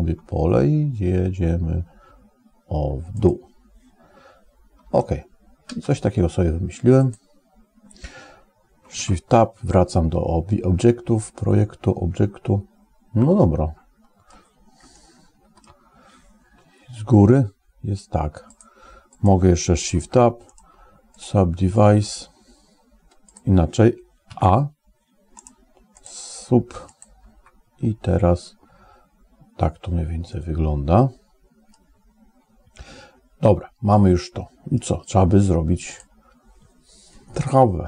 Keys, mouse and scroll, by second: 4.7 space, 5.6 space, 6.8 click, 8.9 ctrl+Tab, 11.0-14.1 middle drag, 14.7 shift+middle click, 16.8 KP_7, 18.4 click, 18.9 click, 19.8 ctrl+Tab, 20.5 right click, 24.1 a, 25.4 right click, 26.7 click, 30.1-31.6 middle drag, 33.7 middle click, 35.8 click.